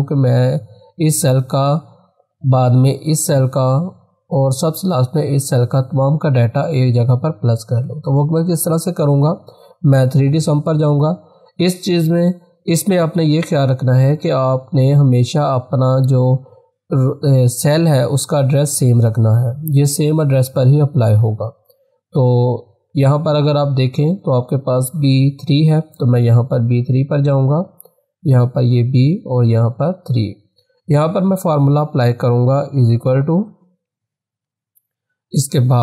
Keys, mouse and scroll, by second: 2.4 click, 26.2 click, 28.6 click, 34.4 =.